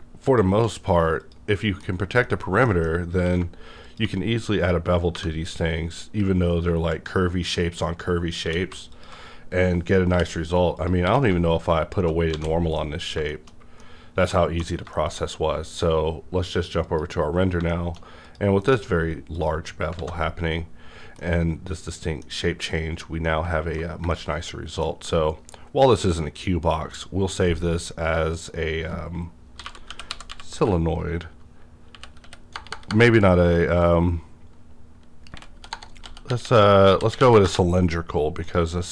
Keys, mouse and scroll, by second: 0.2 click, 1.2 click, 1.8 middle click, 2.7 scroll down 1, 2.9 scroll up 1, 3.2 q, 3.8 ctrl+click, 5.1 1, 5.7 scroll up 2, 7.5 click, 8.0 scroll down 1, 8.4 q, 8.9 alt+click, 9.3-10.1 scroll down 1, 10.1 scroll down 1, 10.1 /, 10.7 click, 11.0 q, 11.7 alt+click, 12.3 alt+a, 12.6 scroll down 1, 12.8 middle click, 12.8 middle click, 13.2 shift+middle click, 13.5-13.8 scroll down 2, 13.6 shift+middle click, 13.8 middle click, 14.7 scroll down 1, 14.9 shift+middle click, 16.8 click, 16.9 click, 17.7 shift+middle click, 18.3 click, 18.6 alt+m, 19.3 click, 20.0 alt+a, 20.7-21.2 scroll down 2, 21.2-21.6 middle drag, 26.9 click, 28.3 click, 29.5-30.5 typing, 31.6-32.3 typing, 35.1-37.2 typing, 37.4 Return, 38.4 click.